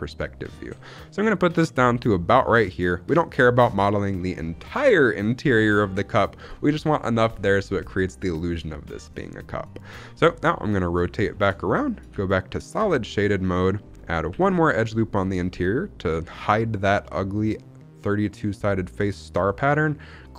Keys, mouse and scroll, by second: 3.2 click, 8.3-8.8 scroll down 2, 8.8-10.4 scroll up 2, 10.4 middle click, 11.2 shift+middle click, 13.4 z, 14.2 ctrl+r, 20.1 click.